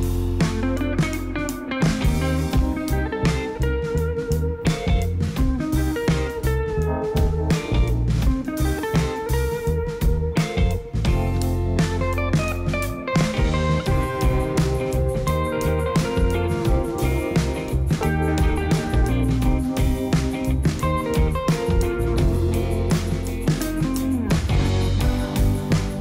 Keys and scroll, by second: 1.0 shift+s, 10.2 Tab, 11.5 Tab, 12.0 shift+a, 14.5 Tab, 15.8 1, 17.7 7, 18.2 shift+z, 21.5 g, 24.0 g, 25.8 g.